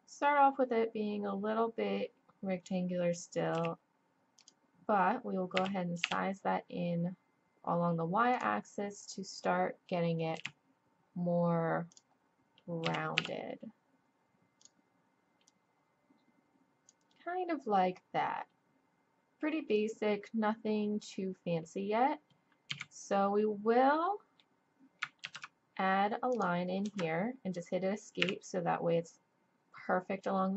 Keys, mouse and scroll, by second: 3.5 e, 5.6 s, 10.4 e, 12.8 s, 15.5-17.3 drag, 18.2-20.4 middle drag, 22.7 z, 23.9 middle click, 24.2 click, 24.5 middle click, 25.2 ctrl+r, 28.2 KP_1.